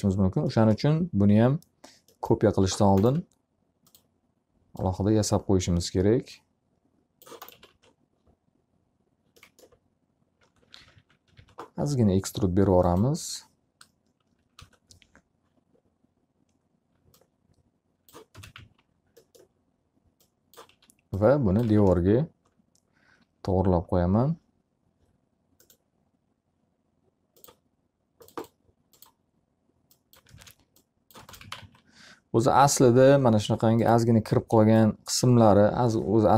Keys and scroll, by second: 7.8 s, 8.4 w, 11.3-12.1 typing, 15.3 Return, 19.0 space, 19.3 z, 21.4 s, 22.4 space, 30.6 space, 32.1 z, 32.3 alt+a, 35.1 w.